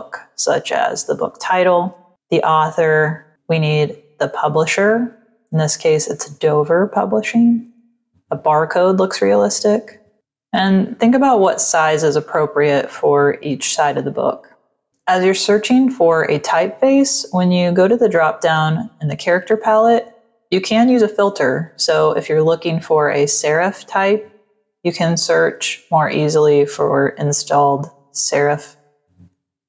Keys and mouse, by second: 4.3 click, 12.1 click, 12.6 click, 14.0 click, 16.7 click.